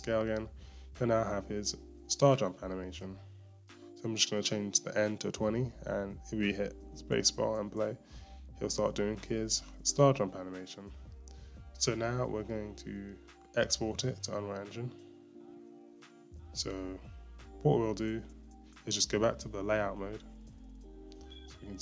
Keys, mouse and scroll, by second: 0.1 i, 1.5-8.5 drag, 8.5 space, 14.3-21.7 drag, 17.4-17.8 scroll, 17.8-18.2 scroll up 1, 21.7 scroll down 1.